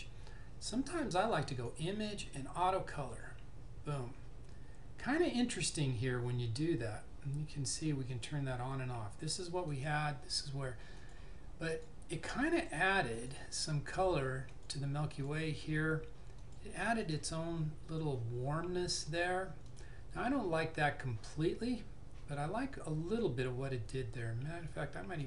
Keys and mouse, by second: 1.7 click, 8.1 click.